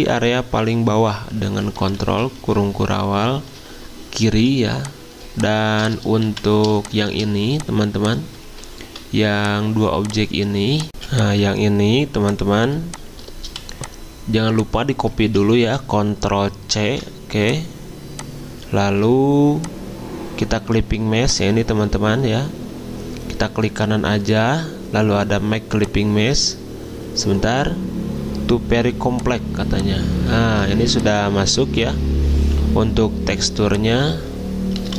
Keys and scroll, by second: 1.9 ctrl+[, 2.2 ctrl+[, 2.3 ctrl+[, 2.5 ctrl+[, 4.3 z, 6.0-6.7 typing, 8.5 ctrl+z, 11.0 z, 13.4 v, 15.2 ctrl+z, 16.8 ctrl+c, 18.8 ctrl+z, 30.5 z, 33.5 v.